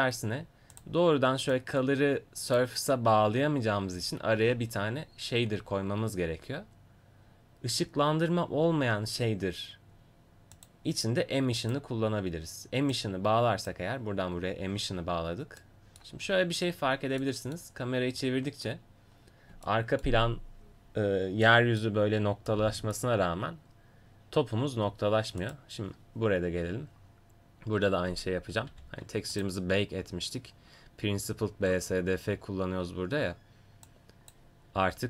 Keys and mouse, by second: 0.7-4.4 drag, 4.4 shift+a, 11.7-14.8 drag, 25.4-28.7 right drag, 28.7 g, 29.3 click, 33.9-35.0 drag.